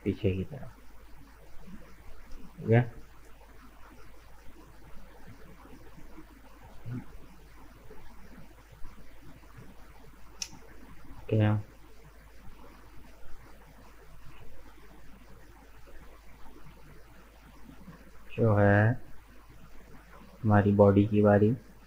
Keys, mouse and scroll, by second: 2.1 scroll down 1, 2.4-4.9 middle drag, 4.9 Tab, 5.1 right click, 5.4-5.7 scroll down 2, 5.7-10.0 middle drag, 10.3 scroll up 1, 10.6 middle click, 11.2 right click, 11.4 Tab, 11.7-13.4 middle drag, 13.4 scroll up 2, 13.7-15.6 middle drag, 15.6-16.1 scroll up 2, 16.5-19.6 middle drag, 19.6 right click, 20.3-21.8 shift+middle drag.